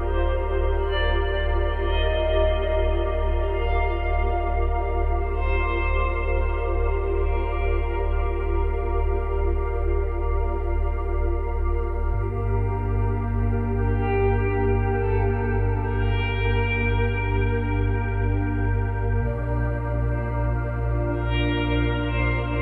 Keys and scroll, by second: 13.1 space, 13.9 space, 19.1 space, 20.8 space.